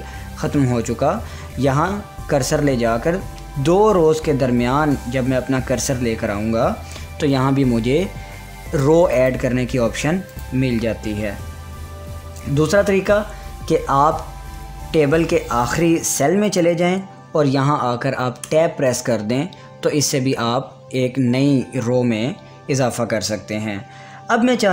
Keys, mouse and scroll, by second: 9.7 click, 12.2 ctrl+z, 17.0 click, 18.9 Tab.